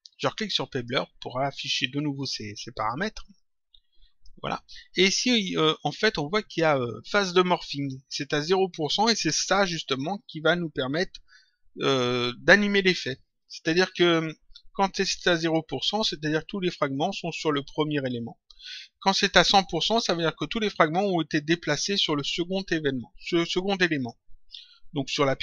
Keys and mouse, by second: 0.7 click, 3.3 click, 7.7 click.